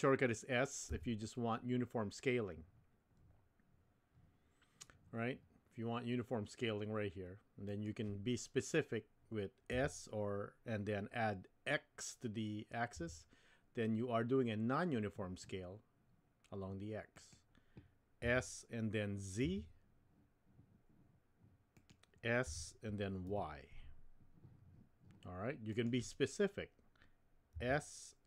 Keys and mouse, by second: 0.9 s, 9.7 s, 18.2 s, 22.4 s, 27.5 s.